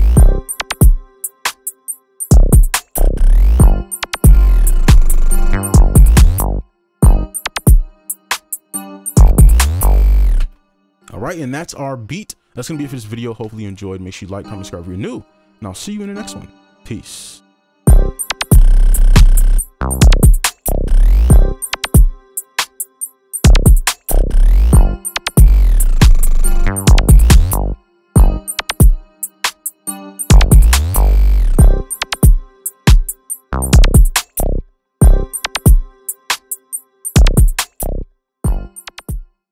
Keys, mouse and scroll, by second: 10.4 space.